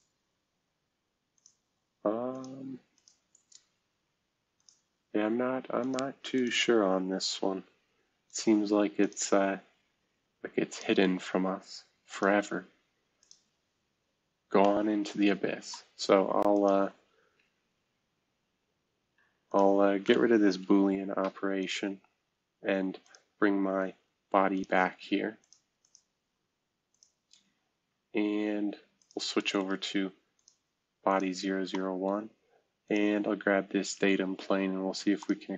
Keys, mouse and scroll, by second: 0.1 space, 3.3 space, 3.8 space, 7.2 space, 8.5 space, 9.6 space, 11.0 space, 12.4-13.1 scroll down 1, 13.6-15.0 scroll up 1, 16.0 scroll down 1, 20.5 Delete, 22.0-22.4 scroll down 1, 23.6-24.5 scroll up 1, 26.1 space, 27.5-28.0 scroll up 1, 28.0-28.6 scroll down 1.